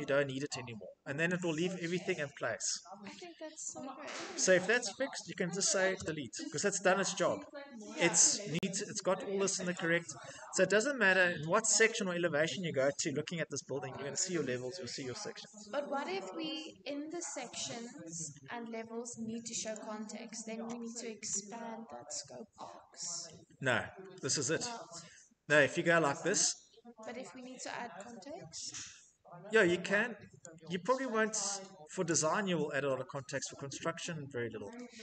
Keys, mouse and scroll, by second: 1.1 click, 3.0 scroll, 4.6 click, 5.7 Delete, 7.6-8.0 scroll, 9.5 click, 10.6 scroll, 11.7-12.4 scroll, 17.4 Escape, 18.0 middle click, 19.4 click, 20.3 right click, 20.9 middle click, 20.9 middle click, 21.0 middle click, 21.1 middle click, 21.7 Escape, 23.0 middle click, 23.3 middle click, 23.3 middle click, 23.4 middle click, 24.2 middle click, 24.7 middle click, 24.8 middle click, 25.0 Escape, 26.0 right click, 26.0 scroll, 27.1-29.2 scroll, 29.2 scroll, 31.8 click, 32.6-33.5 scroll, 34.7 middle click.